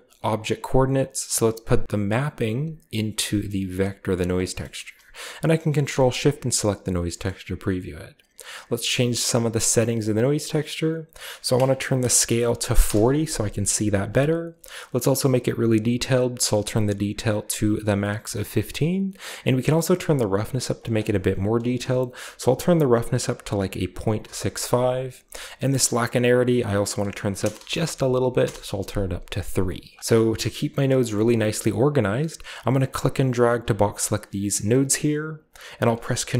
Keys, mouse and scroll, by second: 0.1 click, 0.9 drag, 2.1-3.7 drag, 4.0 click, 4.3-5.5 scroll down 1, 4.5 middle drag, 5.8 ctrl+shift+click, 7.3-11.0 scroll up 2, 11.0 click, 12.2 typing, 12.7 Return, 14.9-16.3 scroll up 2, 16.3-17.4 drag, 19.1 click, 20.7 click, 21.7 BackSpace, 23.0 6, 23.3 5, 24.1 Return, 26.1 click, 26.2 click, 27.3-27.9 typing, 28.3 Return, 29.5 click, 29.9 scroll down 2, 30.3 scroll up 1, 30.4-31.0 middle drag, 31.1-32.7 middle drag, 31.1-32.7 scroll up 1, 32.7-34.6 drag.